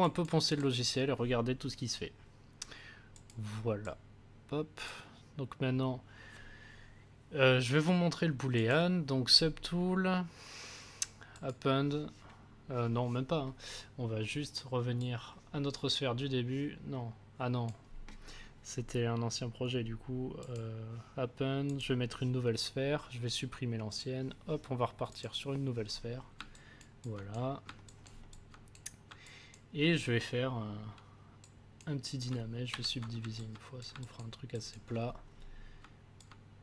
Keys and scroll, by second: 32.6 ctrl+d.